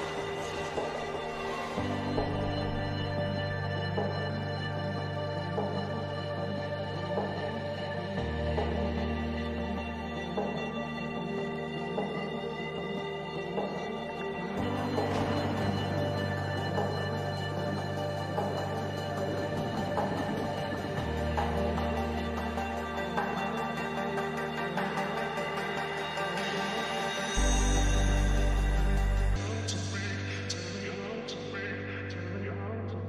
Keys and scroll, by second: 5.3 ctrl+-, 22.7 ctrl+=, 30.7 ctrl+-.